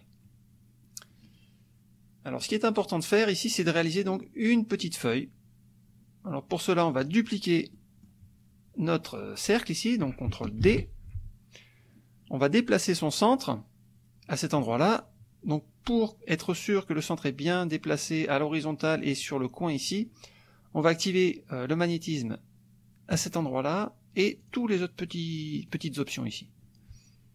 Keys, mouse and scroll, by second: 2.5 click, 7.0 click, 7.7 click, 10.6 ctrl+d, 23.1 click, 24.4 click, 24.9 click, 25.3 click.